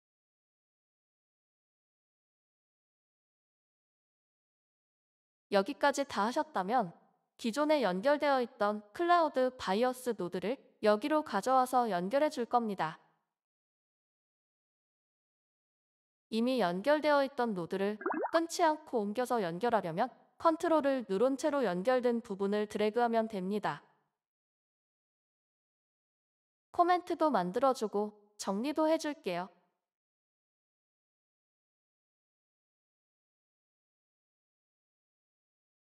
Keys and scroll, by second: 3.4 q, 3.6 BackSpace, 3.8 BackSpace, 4.5 Left, 4.6 Left, 5.1 Left, 5.3 Left, 5.8 Left, 6.1 Left, 29.8-35.0 typing.